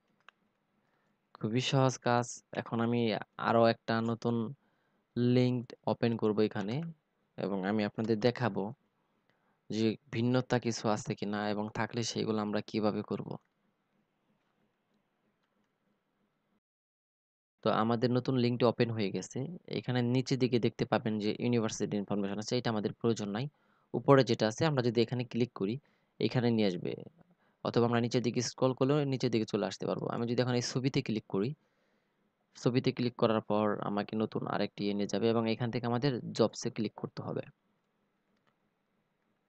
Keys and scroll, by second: 0.0 ctrl+v, 2.5 ctrl+c, 6.5 ctrl+v.